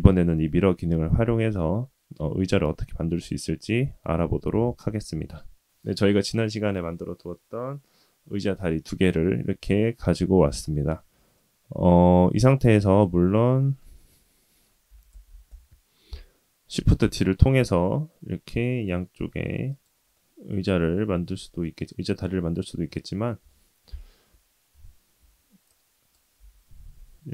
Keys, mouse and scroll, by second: 0.0-0.4 scroll up 5, 0.4 scroll down 2, 2.8-4.7 scroll down 1, 4.9-6.0 middle drag, 11.3-12.5 middle drag, 12.7-13.0 drag, 13.3 scroll down 1, 13.4 middle click, 14.9 g, 17.0 shift+d, 20.1-21.6 middle drag, 23.4 KP_3, 24.7 KP_1, 25.7-26.1 drag, 26.4 g.